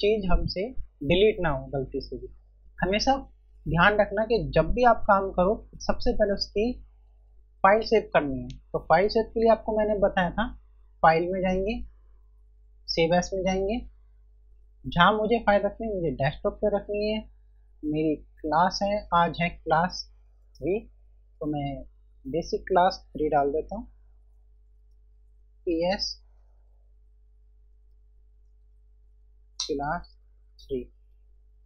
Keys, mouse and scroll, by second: 10.1 F1, 11.3 click, 13.4 click, 13.6 F1, 20.8 click, 22.8 b, 25.2 p, 28.8 typing, 31.2 click.